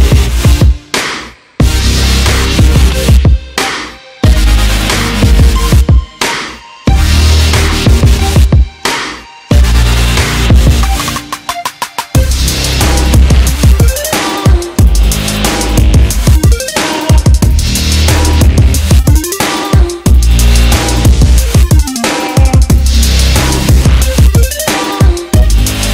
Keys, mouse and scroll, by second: 1.8 r, 5.3 r, 5.4 s, 10.0 e, 16.0 ctrl+z, 16.4 ctrl+z, 19.0 r, 22.5 e.